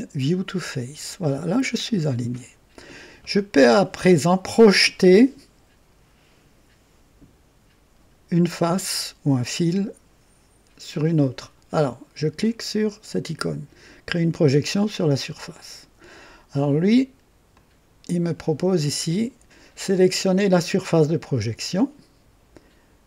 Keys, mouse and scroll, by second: 0.3 click, 1.4-2.2 right drag, 15.5 click, 17.5 click, 21.4 click.